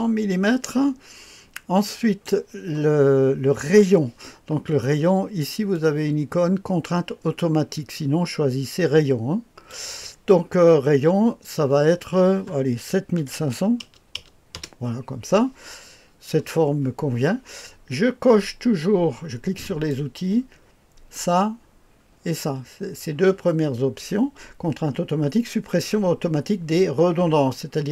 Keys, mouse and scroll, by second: 1.8 click, 5.7-9.7 drag, 13.2 KP_7, 13.4 KP_5, 13.8 KP_0, 14.1 KP_0, 14.5 Return, 19.6 click.